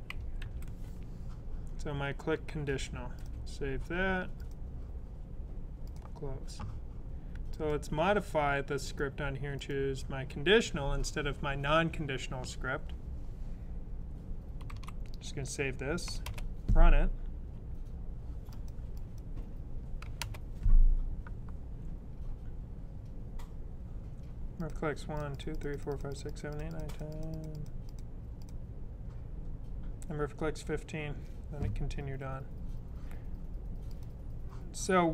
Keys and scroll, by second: 0.0-0.3 typing, 2.4-3.1 typing, 14.5 super+s.